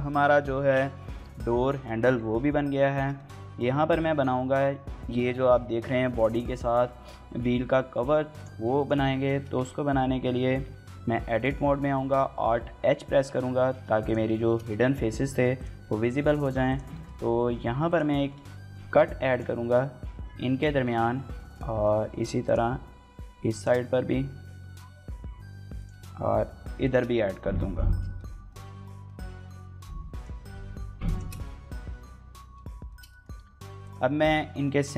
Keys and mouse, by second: 2.1 shift+middle click, 2.8 shift+middle click, 2.9 middle click, 8.8 Tab, 9.4 Tab, 12.0 alt+h, 13.5 shift+click, 14.3 shift+middle click, 14.5 middle click, 15.3 click, 15.3 3, 15.8 shift+middle click, 16.0 middle click, 16.4 click, 16.7 shift+middle click, 17.7 click, 18.0 shift+middle click, 18.4 middle click, 19.1 shift+click, 20.0 j, 20.5 middle click, 20.8 middle click, 21.2 middle click, 21.5 middle click, 22.2 click, 23.3 shift+click, 24.6 middle click, 25.5 click, 26.6 shift+click, 28.0 middle click, 28.3 middle click, 28.9 middle click, 30.9 shift+click, 31.0-32.5 shift+middle drag, 32.7 click, 32.9 click, 33.2 3, 33.6 click, 33.9 shift+middle click, 34.1 middle click.